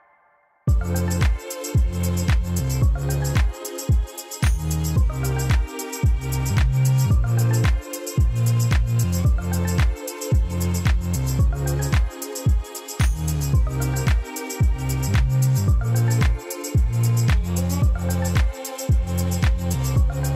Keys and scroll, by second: 2.0-3.3 typing, 3.6 Return, 7.4 ., 7.7 7, 8.0 Return, 10.7 ctrl++.